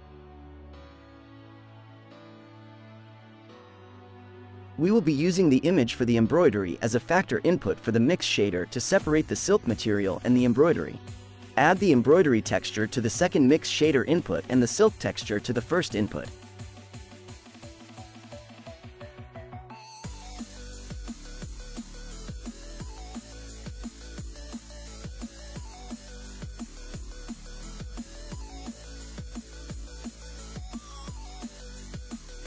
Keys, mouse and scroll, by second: 0.3-0.7 scroll up 4, 0.7-3.3 middle drag, 3.3 scroll up 2, 6.1 click, 11.0 click, 12.3-13.0 scroll down 1, 13.0-15.2 middle drag, 15.2 click, 17.7-19.2 scroll up 5, 19.2 click, 21.5 click, 22.6 click, 23.2-26.1 scroll down 2, 26.1-26.8 scroll down 8, 26.8-27.6 scroll up 2, 27.6 click, 28.6 click, 31.8 click, 32.3 click.